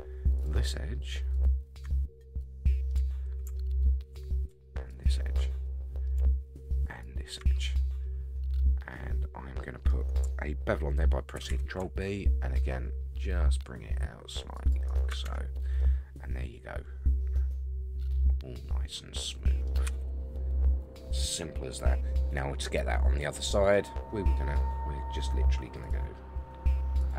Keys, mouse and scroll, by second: 0.4 shift+click, 1.3 shift+click, 1.9 middle click, 3.7 alt+shift+click, 4.9 alt+shift+click, 5.4 middle click, 6.8 shift+click, 7.5-9.9 middle drag, 11.3 ctrl+b, 14.9 shift+right click, 15.2 Tab, 15.8-19.6 middle drag, 19.8 a, 20.0 a, 20.3 scroll down 3, 20.6-22.6 middle drag, 23.7 click, 25.8 drag, 27.0-27.1 drag.